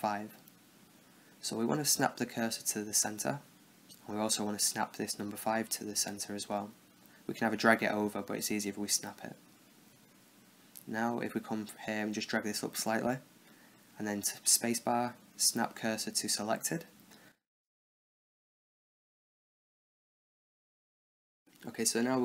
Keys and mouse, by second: 0.0 space, 5.0-6.4 right drag, 6.7-7.9 drag, 8.2 space, 9.1 Down, 9.6 Down, 10.7-13.0 middle drag, 13.0-14.2 drag, 14.6 space, 16.1 Down, 17.6-19.2 middle drag, 19.2 KP_0, 20.7-21.8 drag.